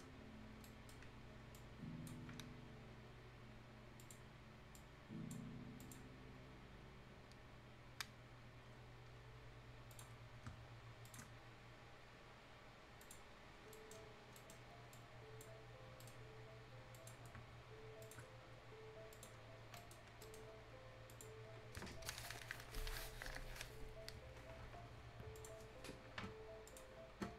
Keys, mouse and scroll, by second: 0.6 scroll up 1, 0.6 right click, 0.7 right click, 1.1 scroll up 1, 1.5 click, 1.6-5.8 drag, 8.3 scroll down 1, 8.5 scroll up 1, 9.9 click, 10.2 scroll down 1, 10.5-11.0 scroll up 1, 11.0 shift+click, 13.4 scroll down 1, 13.7 right click, 14.0 scroll down 1, 14.2-14.9 scroll up 2, 14.4 right click, 14.9 click, 15.6-16.0 scroll up 1, 16.0 right click, 16.9 click, 17.2 scroll down 1, 17.5-17.8 shift+scroll up 1, 18.0 shift+click, 19.1 click, 19.4-19.7 scroll down 1, 19.8 right click, 20.1 scroll up 1, 20.2 right click, 21.1 click, 25.4 click.